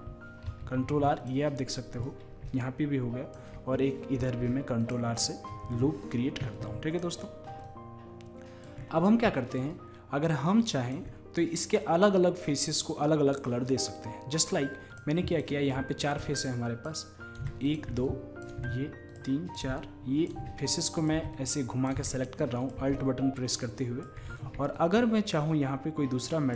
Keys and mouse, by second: 0.5 ctrl+r, 2.6-4.1 drag, 4.2 ctrl+r, 4.2 click, 6.6 click, 6.9 click, 7.7-11.6 middle drag, 14.4-16.3 right drag, 15.4-20.0 drag, 20.2-25.0 drag, 25.2 click, 25.3 click, 26.3 click.